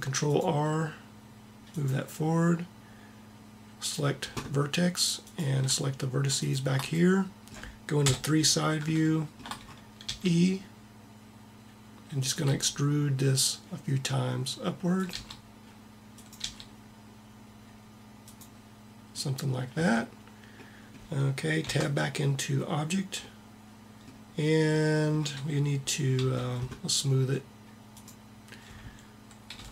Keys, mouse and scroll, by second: 1.8-2.8 drag, 8.1 KP_3, 10.0 e, 10.9 middle click, 12.4 e, 15.1 e, 16.3 e, 19.8 a, 21.6 Tab, 26.1 t, 29.5 t.